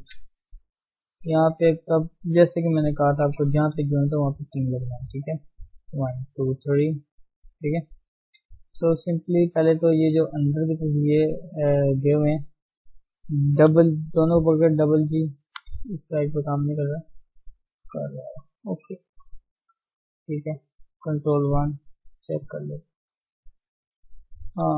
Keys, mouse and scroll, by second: 0.3 shift+middle click, 0.6 scroll up 1, 0.8 shift+z, 1.8 shift+z, 3.1 KP_1, 3.7-4.1 scroll down 1, 4.1 shift+middle click, 4.5-5.7 scroll up 1, 5.7 click, 6.5 d, 7.3 click, 7.5 d, 7.7 right click, 8.4-8.8 scroll up 2, 8.8 shift+z, 8.9 shift+middle click, 9.2 shift+scroll up 2, 9.9 scroll up 2, 9.9 shift+z, 10.2-11.5 middle drag, 11.5 click, 11.7 scroll down 2, 11.8-12.8 middle drag, 19.0 KP_1, 19.7-20.3 scroll down 5, 20.3 Tab, 21.8 click, 22.0 ctrl+1, 22.4-22.8 scroll down 3, 22.8 click, 23.0-24.0 middle drag, 24.0 scroll up 2, 24.2 Tab, 24.5 middle click.